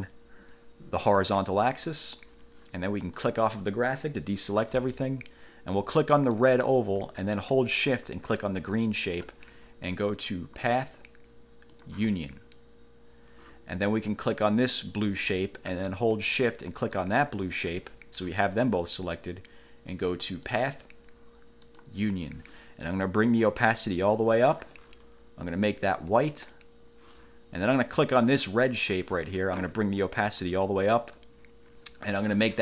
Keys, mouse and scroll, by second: 1.2 click, 3.3 click, 6.5 click, 8.8 shift+click, 10.8 click, 11.9 click, 14.5 click, 16.9 shift+click, 20.5 click, 21.8 click, 23.7 click, 26.1 click, 28.7 click, 30.5 click.